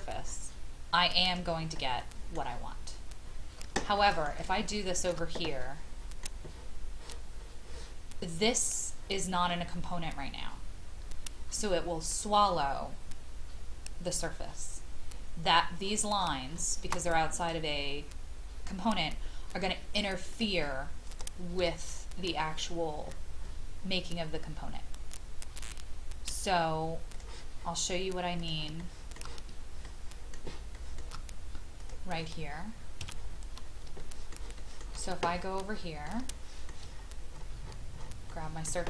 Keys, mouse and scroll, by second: 0.3-1.2 scroll up 1, 1.2 click, 2.0 middle click, 2.4-3.6 scroll down 1, 3.9 shift+middle click, 4.5 shift+middle click, 5.6-7.0 middle drag, 15.8 scroll up 1, 17.4 click, 18.9-19.8 scroll down 1, 19.8 scroll down 1, 20.3 click, 21.8 scroll up 1, 27.1 click, 28.8 shift+middle click, 30.3 shift+middle click, 31.8 click, 32.1-33.0 scroll down 1, 33.0 Escape, 33.2-33.8 scroll down 1, 33.9 shift+middle click, 34.6 shift+middle click, 34.8-35.5 shift+scroll down 1, 35.5 scroll down 1, 35.6 middle click, 36.3 shift+middle click, 36.9-38.0 scroll up 1, 38.3-38.8 middle drag.